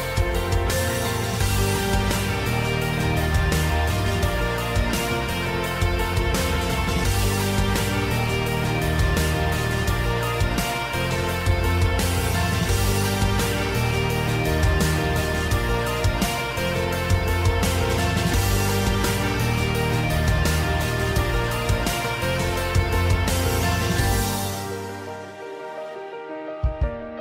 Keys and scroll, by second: 2.7 super+z, 18.5 v, 18.7 space, 18.9 space, 19.0 space.